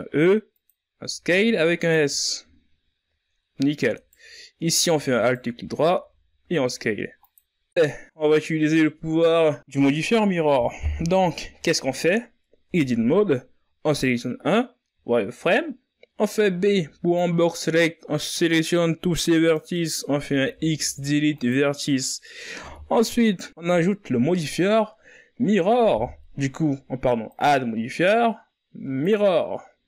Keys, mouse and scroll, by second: 0.6 s, 1.5 z, 2.0-3.3 scroll down 5, 3.5 alt+right click, 4.7 alt+right click, 5.4 s, 7.3 scroll down 3, 7.6 z, 8.3 z, 8.8 ctrl+scroll down 2, 9.1 Tab, 9.7-10.7 scroll down 1, 10.7-11.6 scroll up 1, 15.3 Tab, 16.5 right click, 17.6 z, 19.3 b, 23.1 x, 25.3 Tab.